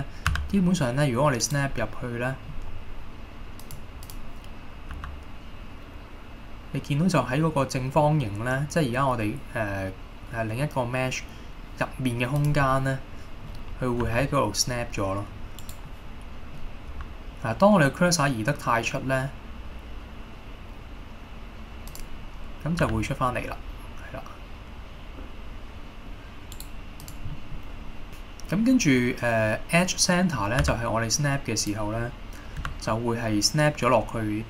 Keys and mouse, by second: 0.4 g, 1.5 right click, 1.9 middle click, 3.7 click, 5.0 g, 12.5 click, 12.8 middle click, 14.1 g, 15.7 right click, 16.0 middle click, 17.0 g, 22.0 click, 22.9 g, 26.7-27.2 right drag, 27.2 drag, 27.4 middle drag, 28.1-29.7 drag, 30.2-30.6 middle drag, 30.7 g, 31.7 click, 32.8 g.